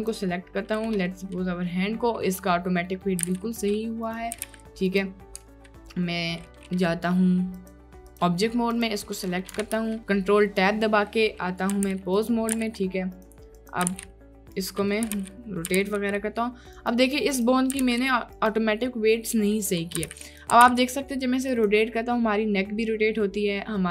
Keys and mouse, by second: 0.0-1.1 drag, 1.1 middle click, 1.7 middle click, 2.3 middle click, 2.9 click, 3.3 r, 3.4 x, 4.4 r, 4.5 y, 7.6-8.2 right drag, 9.3 click, 9.8 ctrl+Tab, 10.7 click, 11.8 r, 11.9 x, 12.6 r, 13.9 r, 14.0 x, 15.0 click, 15.2 y, 15.7 r, 15.8 y, 17.8 r, 19.6 click, 19.6-20.7 typing.